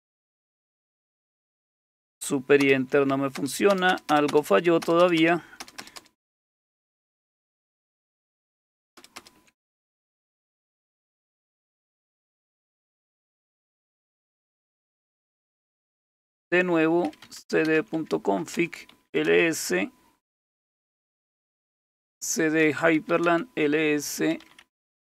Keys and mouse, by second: 2.6 super+Return, 3.3 super+Return, 3.7-4.3 super+Return, 4.8 super+Return, 5.0 super+Return, 5.2 super+Return, 5.6 super+Return, 5.8 super+Return, 6.0 super+Return, 6.4 super+Return, 6.6 super+Return, 6.9 super+Return, 7.9 super+Return, 8.1 super+Return, 9.0 super+Return, 9.2 super+Return, 10.2 super+m, 13.9 Return, 14.2 Return, 14.3 Return, 14.5-19.4 typing, 18.5 Return, 21.3-25.0 typing.